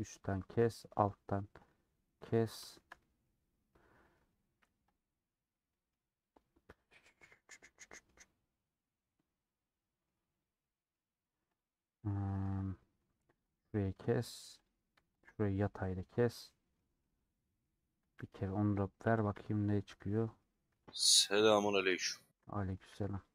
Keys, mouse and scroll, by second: 0.1 click, 0.4 scroll down 1, 0.5-1.8 middle drag, 1.8 click, 2.2-4.1 middle drag, 4.1-5.0 scroll up 1, 5.0 alt+click, 5.2-7.2 middle drag, 7.2-7.6 scroll down 1, 7.6-10.2 middle drag, 10.2 click, 10.5 middle click, 10.9-11.6 scroll up 1, 11.6 click, 12.3 middle click, 12.4 scroll down 1, 12.4-12.7 scroll up 2, 13.4 alt+click, 13.8 middle click, 14.7 click, 15.6-18.0 middle drag, 18.0 a, 20.1 middle click, 20.4 scroll up 2, 21.6 alt+click, 22.9 a.